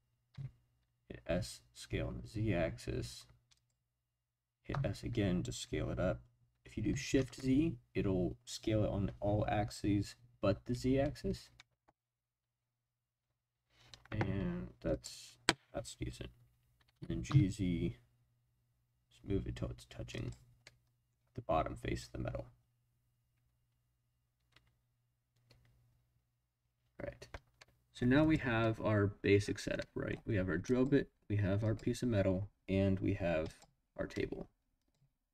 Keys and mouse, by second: 0.3 z, 3.5 click, 4.7 s, 7.2 shift+z, 14.9 click, 16.9 g, 17.3 z, 20.1 click, 20.6-21.1 middle drag, 27.6-28.0 middle drag, 28.2 click, 28.6-30.1 middle drag, 30.7 click, 31.6 click, 33.4 click.